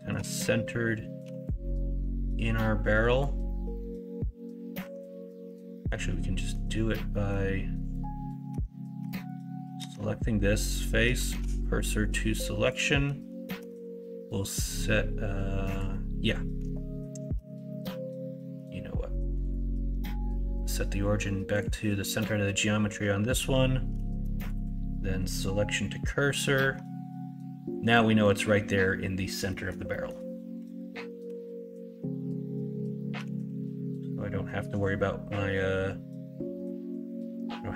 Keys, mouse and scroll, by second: 1.2 g, 4.8 Tab, 5.1 middle click, 5.7 middle click, 6.3 middle click, 7.1 middle click, 7.8-8.5 drag, 8.5 Tab, 8.9 Tab, 9.7 Tab, 10.8 middle click, 11.3 shift+s, 13.6 Tab, 17.6-18.5 middle drag, 24.4 shift+s, 27.9-28.2 middle drag, 29.4 middle click, 29.8 middle drag, 30.5 KP_1, 30.9 KP_3, 31.2 Tab, 33.1 g.